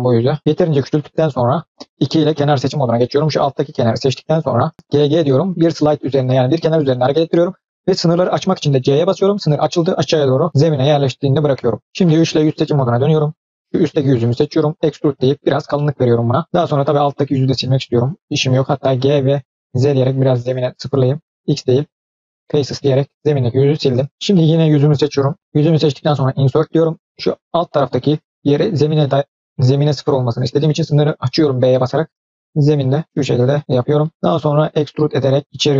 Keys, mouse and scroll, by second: 2.0 2, 2.6 click, 4.7 g, 10.5 middle click, 12.2 3, 12.7 click, 13.2 click, 14.5 e, 15.6 middle click, 16.2 scroll up 2, 16.4 middle click, 16.5 scroll down 1, 16.6 scroll up 2, 16.9 middle click, 17.8 click, 18.9 g, 21.2 x, 22.5 scroll down 2, 22.6 middle click, 24.3 click, 25.3 i, 34.7 e.